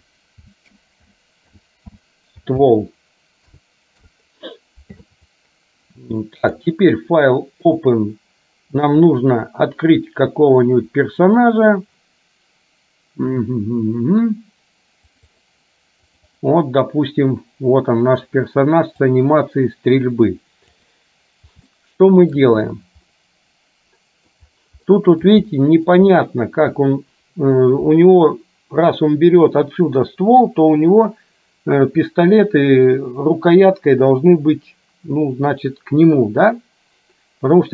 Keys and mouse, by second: 6.5-8.0 drag, 19.2-20.9 drag, 21.8 shift+middle click, 23.2-24.4 middle drag, 24.9 middle click, 25.7 shift+middle click, 26.2-27.7 middle drag.